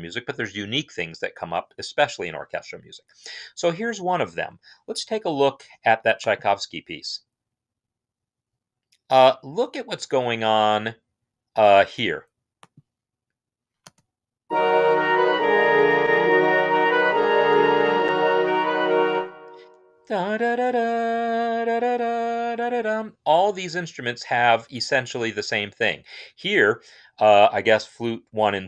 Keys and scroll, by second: 13.7 space, 19.0 space.